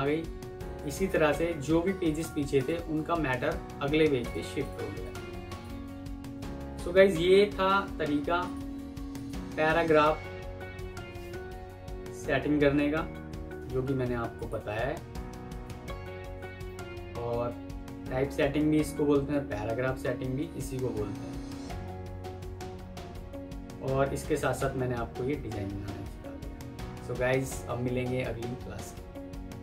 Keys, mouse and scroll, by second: 2.5 double click, 7.4 click, 8.0 Escape, 11.9 F9, 13.6 Escape, 14.9 F4, 15.4 F9.